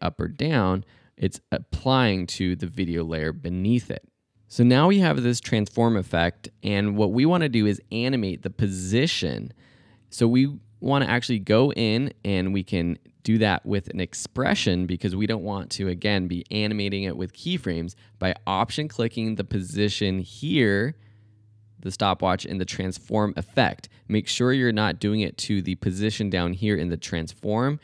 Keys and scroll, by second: 0.8 super+z, 4.3 super+z.